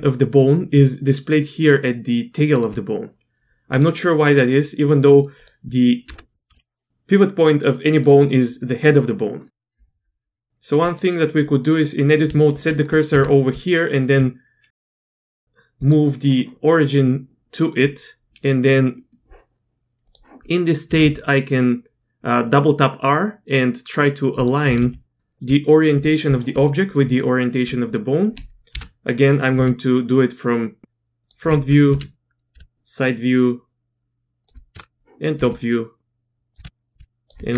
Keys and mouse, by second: 0.7 d, 0.9-2.5 drag, 2.6 d, 3.9 d, 5.3 click, 6.0 Tab, 6.5 r, 9.7 Tab, 11.5 click, 12.5 shift+s, 13.1 Tab, 13.5 click, 14.9 shift+s, 19.0 click, 20.4 click, 20.9 r, 24.6-27.6 typing, 28.7 KP_1, 29.5 r, 31.9 KP_3, 32.5 r, 34.7 KP_7, 35.4 r, 36.6 KP_2, 36.6 KP_1, 37.0 r.